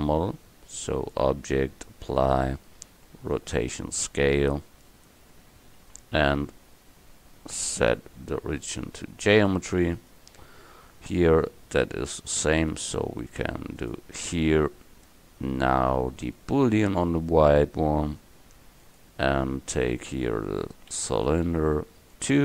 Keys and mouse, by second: 5.9 KP_1, 7.8-10.0 drag, 10.0-16.6 right drag, 13.8-16.6 drag.